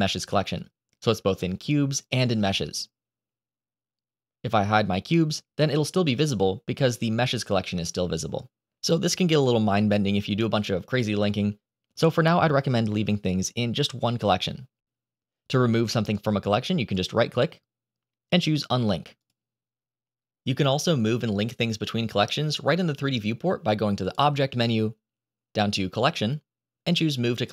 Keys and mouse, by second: 4.8 click, 9.0 click, 16.8-19.2 right drag, 23.9-27.5 drag.